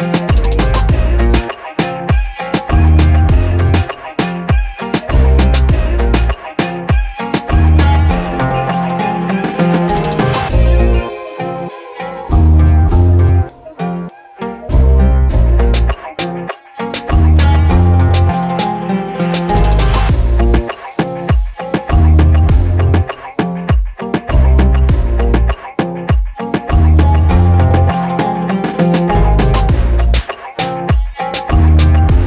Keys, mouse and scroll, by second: 0.0 alt+click, 0.4 shift+right click, 1.5 alt+click, 2.0 alt+middle click, 2.8-4.5 scroll up 2, 7.7 click, 8.2 click, 10.3-11.6 typing, 12.7-13.6 drag, 15.5 scroll down 1, 15.7 alt+click, 16.8 alt+click, 17.5-18.8 alt+drag, 19.2 alt+click, 19.6 alt+click, 20.7 click, 21.9 click, 22.6 click, 24.7 click, 25.5 alt+click, 26.4 shift+right click, 27.4 alt+click, 27.8 alt+middle click, 30.9 right click.